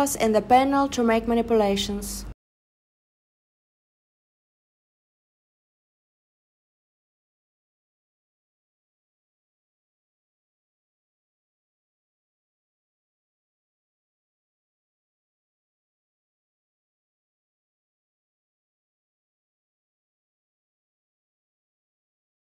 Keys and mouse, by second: 0.3 click, 1.2-2.3 drag, 7.5 click, 9.4 e, 11.5 click, 12.3 click, 12.6 super+z, 12.6 click, 13.1 click, 16.4 s, 20.5 click.